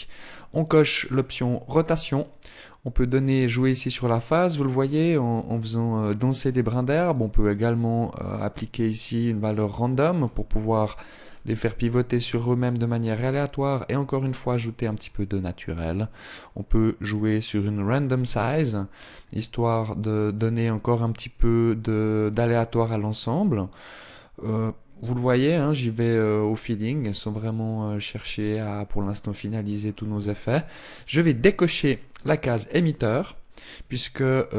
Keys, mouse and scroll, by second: 0.1 click, 6.7 click, 11.8 click, 15.8 click, 25.7 click, 31.7 click.